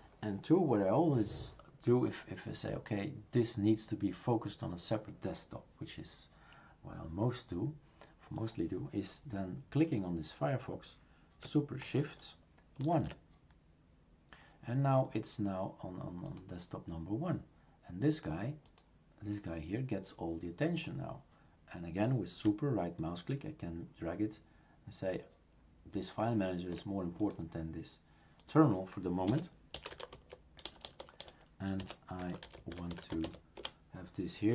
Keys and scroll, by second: 12.8 shift+super+1, 29.3 BackSpace.